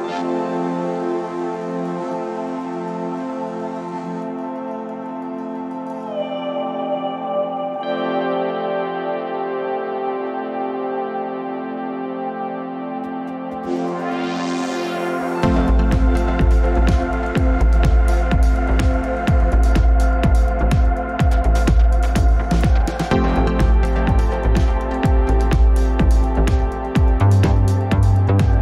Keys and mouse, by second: 0.8 click, 1.7 drag, 2.6 click, 3.1 ctrl+z, 3.4 ctrl+z, 4.7 ctrl+z, 8.7 Tab, 9.3 Tab, 12.7 ctrl+shift+z, 12.9-14.9 ctrl+shift+z, 15.7 ctrl+shift+z, 19.8 Tab, 20.3 Tab, 23.6 ctrl+z, 24.4 ctrl+z, 25.1-26.8 ctrl+shift+z.